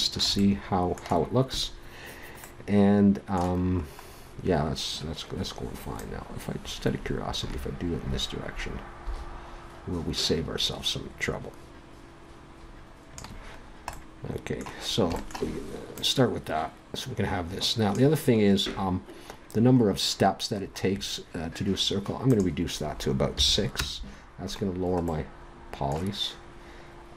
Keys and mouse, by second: 4.1-6.0 middle drag, 6.0-7.8 drag, 13.5-16.0 middle drag, 16.0-17.9 drag, 20.2-22.3 middle drag, 22.3-24.7 drag, 24.7-27.1 middle drag.